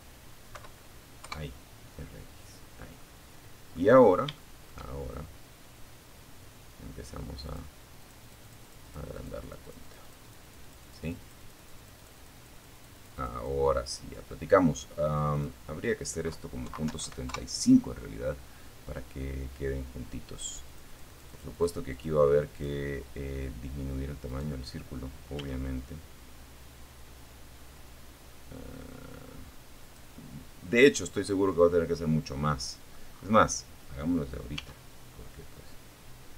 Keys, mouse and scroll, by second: 0.8-1.2 scroll down 2, 1.2 middle click, 2.1-2.5 scroll up 3, 2.5 shift+middle click, 2.9 shift+click, 5.7 click, 6.2-7.3 drag, 7.3-11.9 drag, 13.5 click, 14.8 KP_Decimal, 15.1 KP_7, 15.2 KP_5, 15.6 KP_Enter, 18.7-20.0 drag, 20.1 click, 20.7 click, 22.5 right click, 23.5 s, 28.0 click, 28.7-29.1 scroll down 2, 29.3-31.3 middle drag, 31.3 scroll up 1, 32.7 s, 35.9 click.